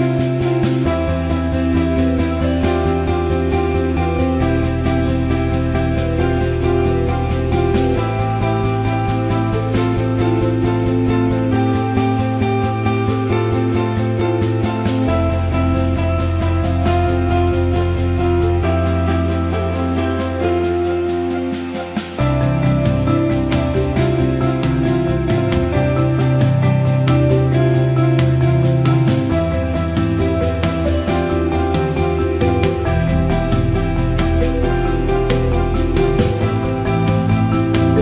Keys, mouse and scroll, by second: 1.1 drag, 5.2 ctrl+shift+b, 10.6 ctrl+z, 13.9 click, 15.1 click, 16.7 ctrl+a, 18.6 click, 19.0-22.5 right drag, 22.5 click, 23.4 click, 24.0 click, 25.0 alt+middle click, 26.0 click, 26.7 alt+shift+middle click, 27.1 alt+middle click, 27.4 Tab, 27.9 alt+middle click, 28.4 alt+middle click, 29.1 click, 30.3 ctrl+b, 33.8 alt+middle drag, 34.5 click, 35.6 Tab, 36.1 alt+middle click.